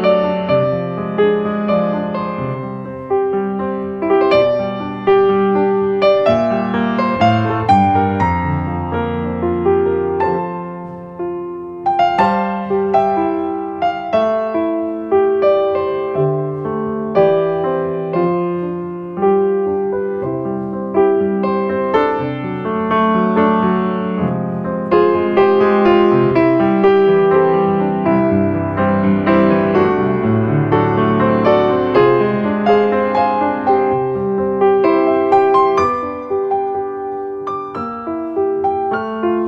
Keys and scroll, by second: 30.2 alt+space, 30.7 space, 35.2 alt+space.